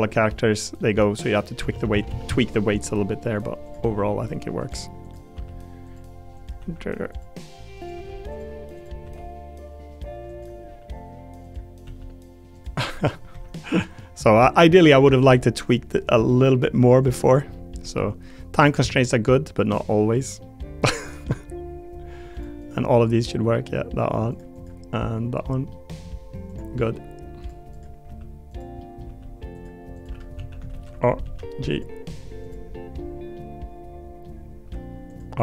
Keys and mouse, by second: 0.1 click, 0.8 click, 1.7 ctrl+z, 1.9 ctrl+z, 2.1 ctrl+z, 2.2 ctrl+z, 2.6 click, 3.9 r, 4.6 click, 5.3 r, 6.6 r, 7.8 click, 8.0 r, 9.0 r, 10.6 r, 11.4 click, 11.8 r, 12.8 middle click, 13.3 r, 13.6-14.7 drag, 14.7 middle click, 15.2 r, 16.3 middle click, 17.5 click, 17.8 r, 18.8-19.9 drag, 20.4 click, 20.9 middle click, 22.3 click, 22.6 click, 23.0 middle click, 24.3 click, 24.5 click, 24.9 middle click, 25.7 middle click, 26.5 click, 26.8 middle click, 27.7 click, 28.0 r, 28.8 click, 29.1 r, 30.3 a, 30.7 alt+r, 31.2 alt+g, 31.7 click, 32.7 click, 33.3 click, 33.9 middle click.